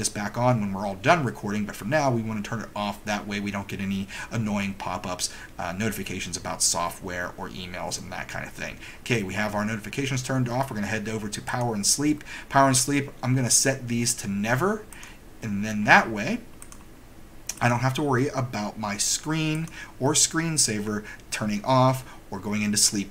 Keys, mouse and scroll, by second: 11.6 click, 15.0 click, 16.7 click, 17.7 click, 19.7 click.